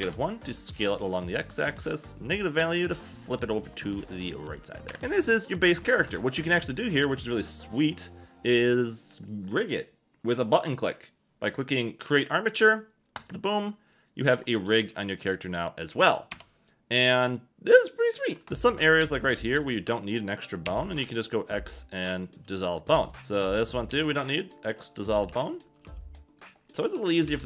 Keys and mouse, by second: 0.0 1, 0.7 click, 4.9 Tab, 5.0 a, 5.2 click, 6.0 shift+middle click, 16.3 Tab, 18.4 ctrl+shift+z, 20.7 x, 22.0 click, 23.0 click, 23.2 a, 23.2 b, 23.9 x, 25.3-27.2 typing, 26.4 click.